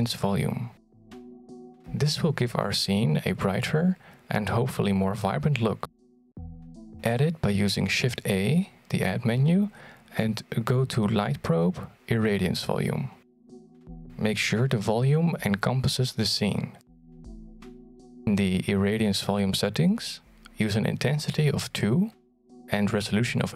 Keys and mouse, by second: 0.2 r, 12.7 shift+a, 15.9-16.3 middle drag, 16.6 g, 18.1-18.4 middle drag, 18.5 g, 20.1-21.3 middle drag, 21.4-21.8 shift+middle drag, 22.0-23.5 middle drag.